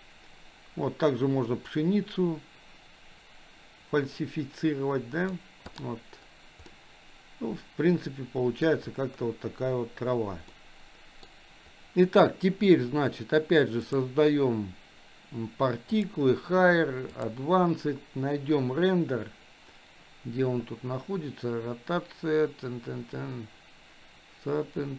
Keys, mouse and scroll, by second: 6.7-8.6 middle drag, 10.5-11.3 middle drag, 13.8 click, 16.0 click.